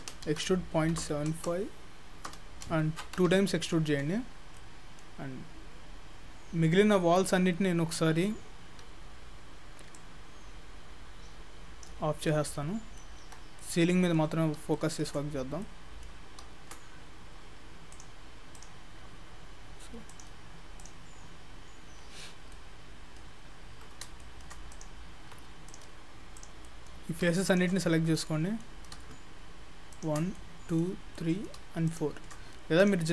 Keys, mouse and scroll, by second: 0.1 e, 2.3 e, 4.6 middle click, 5.2-5.6 scroll down 2, 5.6-6.1 scroll up 1, 6.1-7.6 scroll down 10, 7.6 scroll down 1, 7.9 scroll down 1, 8.0 middle click, 8.0 scroll down 1, 8.7 Tab, 10.0 click, 12.3 scroll up 4, 12.6 middle click, 13.3 Tab, 13.7 middle click, 14.4-14.8 scroll up 2, 14.8 shift+middle click, 15.6 middle click, 18.0 click, 18.6 click, 20.1 click, 20.8 click, 22.2-22.5 scroll down 5, 22.5 scroll up 1, 22.5 middle click, 23.4-24.0 scroll up 4, 24.2 shift+middle click, 24.7 click, 25.2 Tab, 25.7 click, 26.4 click, 26.6 scroll up 1, 26.7 middle click, 27.5 shift+click, 27.7 shift+click, 27.8 middle click, 28.3 middle click, 29.9 shift+click, 30.4 middle click, 31.2 middle click, 31.9 shift+click, 32.8 click.